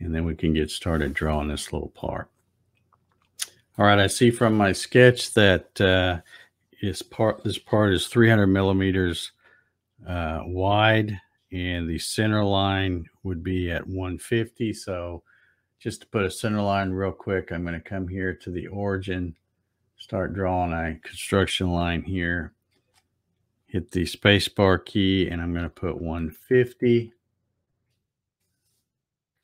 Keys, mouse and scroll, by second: 2.1-4.0 shift+middle drag, 16.9 click, 19.5-23.0 drag, 22.7 space.